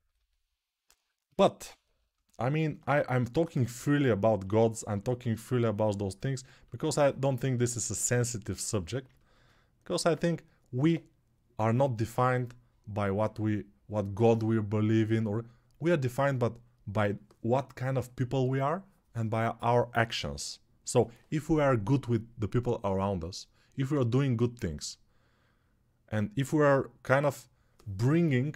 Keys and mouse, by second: 7.3 alt+right click, 7.5-28.5 alt+drag.